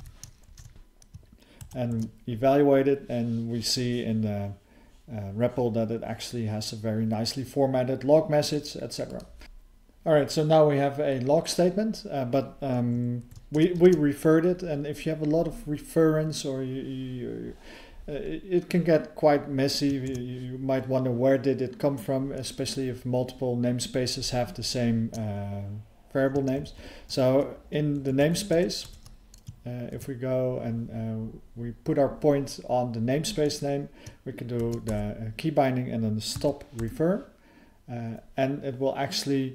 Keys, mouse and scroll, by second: 2.0 ctrl+e, 9.1 click, 9.2 click, 9.4 ctrl+_, 9.4 ctrl+s, 9.4 alt+f, 9.4 BackSpace, 13.8 ctrl+alt+space, 20.1 ctrl+g, 28.0 alt+f, 28.2 alt+f, 28.5 alt+f, 28.8 alt+f.